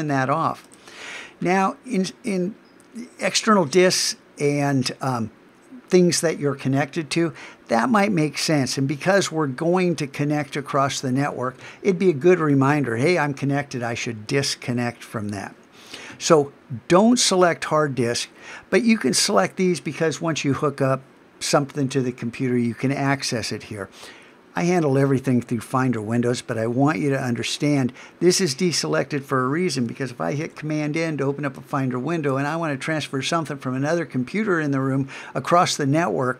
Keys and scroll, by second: 30.4 super+n.